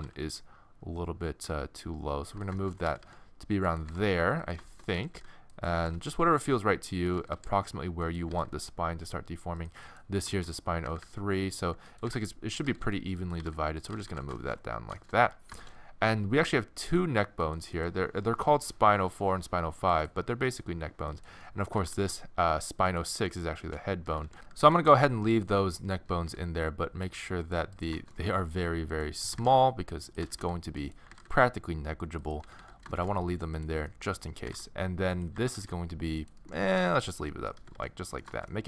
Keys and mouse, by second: 2.6 click, 2.9 a, 3.0 a, 3.9 g, 5.0 a, 5.2 a, 5.7 g, 7.2 a, 7.4 a, 8.3 g, 10.9-14.1 typing, 21.5 middle click, 21.9 r, 23.1 middle click, 24.2 a, 24.3 a, 24.7 a, 24.9 a, 25.6 middle click, 26.1 a, 26.3 a, 27.8 right click, 28.2-29.2 middle drag, 29.4 g, 30.3 a, 30.4 a, 31.1 g, 32.5 a, 32.6 a, 34.5 g, 35.4 g, 36.8 g, 37.6 a, 37.8 a.